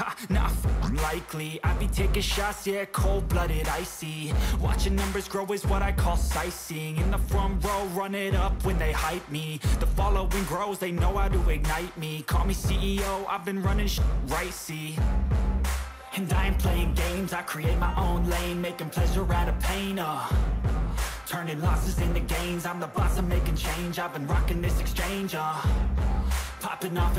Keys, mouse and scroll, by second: 0.6 click, 3.4 shift+click, 10.6 shift+click.